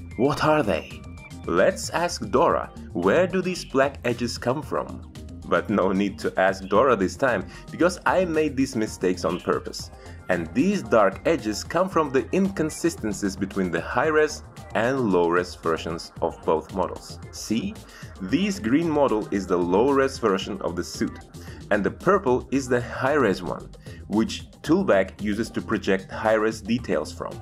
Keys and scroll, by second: 25.2 ctrl+z, 25.4 x.